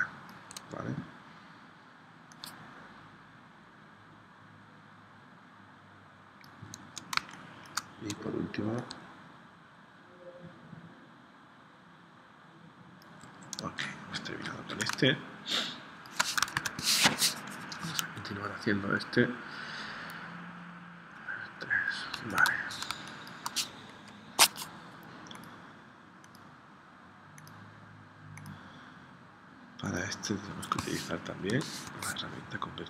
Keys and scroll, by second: 7.2 space, 15.0 space, 16.5 super+Tab, 22.3 super+Tab, 22.9 space, 24.0 p, 31.5 shift+c.